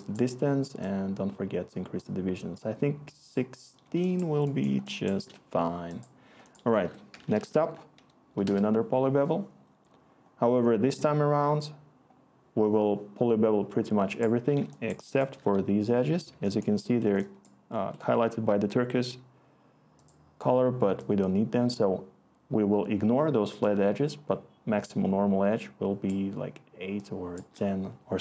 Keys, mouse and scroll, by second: 6.8 Tab, 6.8-8.0 typing, 8.4 Return.